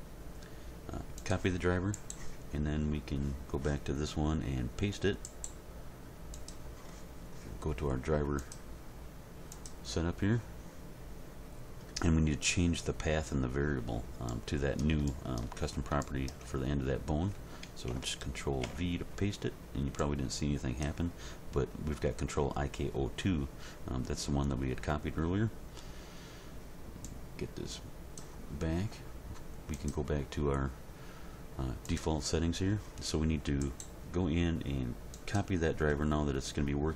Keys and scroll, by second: 18.6 ctrl+v.